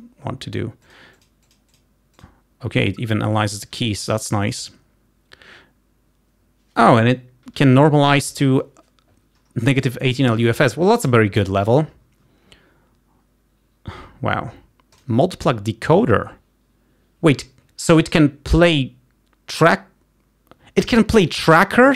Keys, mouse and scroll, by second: 1.1-2.5 drag, 4.6 click, 15.1 click.